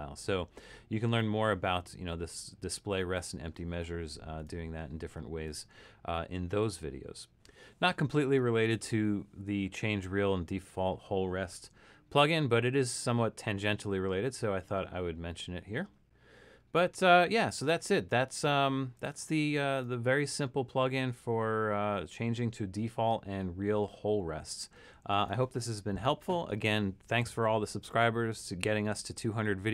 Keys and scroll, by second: 6.1 Escape.